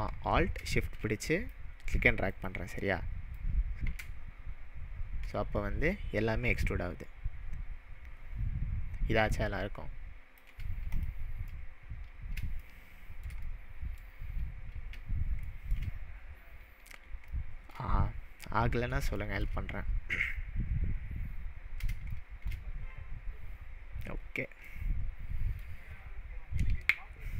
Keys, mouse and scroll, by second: 3.4-10.5 drag, 11.0 click, 11.5-12.4 middle drag, 16.3-17.0 scroll up 2, 17.3-17.8 shift+middle drag, 24.9-25.2 scroll up 1.